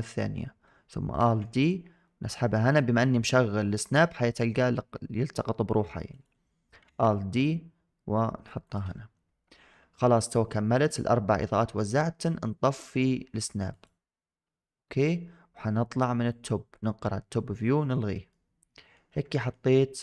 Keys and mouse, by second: 1.1 alt+d, 6.7 alt+d, 16.2 click, 18.3-18.9 middle drag, 19.4 shift+middle click, 19.6-20.0 middle drag.